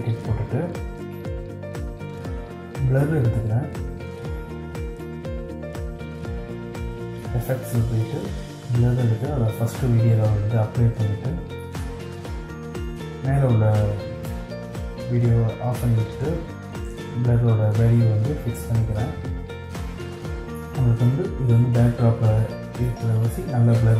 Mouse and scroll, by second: 6.6 right click.